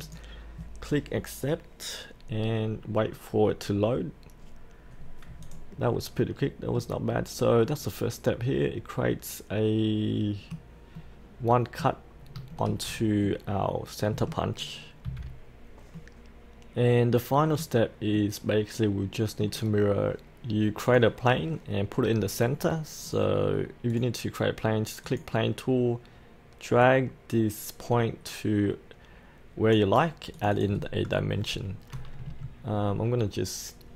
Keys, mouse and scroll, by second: 0.0 click, 5.8-6.2 scroll up 1, 6.2-10.8 middle drag, 12.0 scroll down 1, 12.5 shift+middle click, 12.9-13.2 scroll up 1, 13.2-14.8 middle drag, 15.0 click, 15.9-19.8 middle drag, 19.8-20.8 scroll down 1, 20.8-30.3 drag.